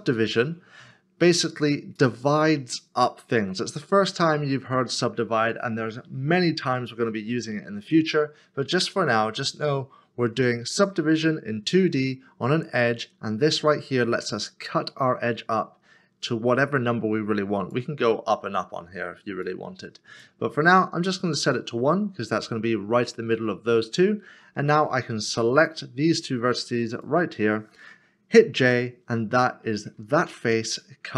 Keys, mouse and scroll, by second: 26.9 shift+l, 30.3 3.